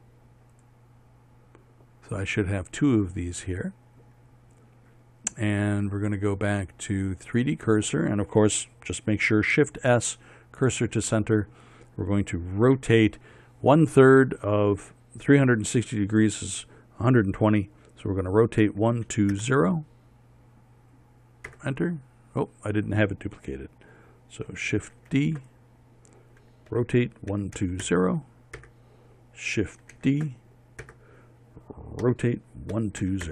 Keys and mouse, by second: 0.5 z, 7.9-9.3 drag, 10.2 shift+s, 13.4 r, 25.7 shift+d, 27.4 r, 30.6 shift+d, 32.7 r.